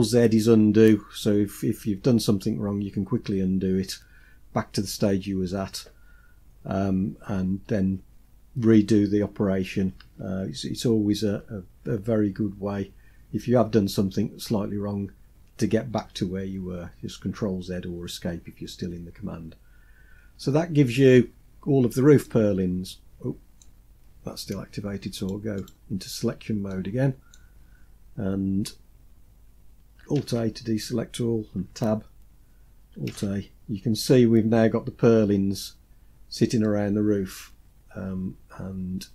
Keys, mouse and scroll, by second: 25.5 click, 26.6 middle click, 27.4-28.1 scroll down 2, 28.1-28.5 scroll down 1, 30.1 alt+a, 31.4 Tab, 33.0 alt+a, 36.5-39.1 middle drag.